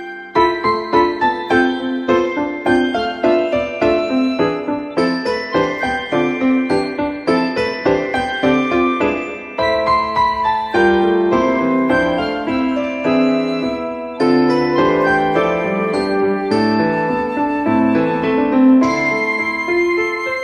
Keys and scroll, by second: 10.2-11.1 typing, 11.6 Return, 19.5 e.